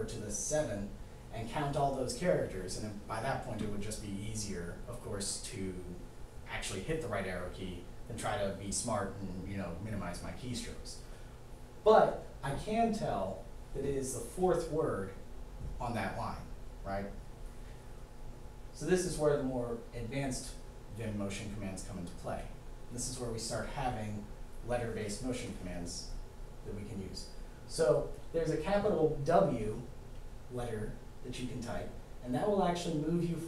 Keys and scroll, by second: 30.9 w.